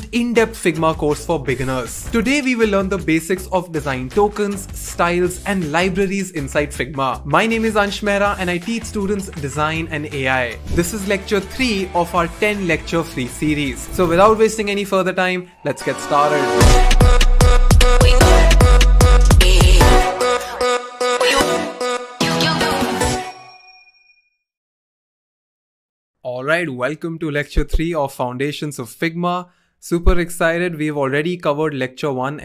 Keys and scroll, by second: 26.2 typing.